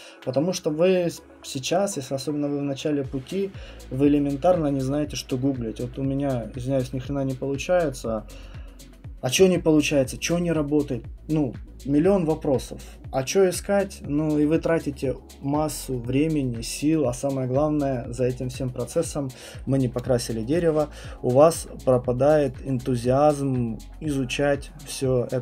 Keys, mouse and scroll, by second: 20.6 click, 21.5 right click, 22.4 right click.